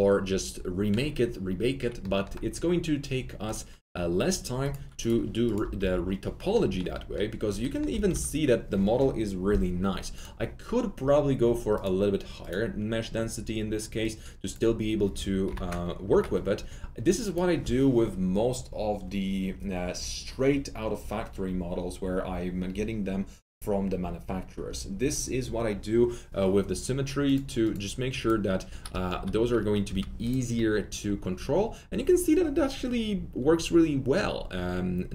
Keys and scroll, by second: 5.7 typing, 7.8-8.5 typing, 15.4-16.0 typing, 28.8 F3, 29.1 F3, 29.4 F4, 29.8 F4.